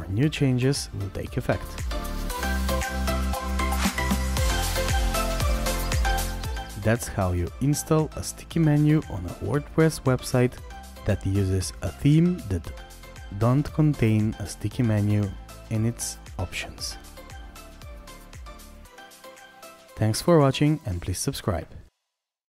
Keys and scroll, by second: 2.4-5.7 scroll down 1, 5.7-6.0 scroll down 1, 15.0-17.8 scroll up 2, 22.3 scroll up 2.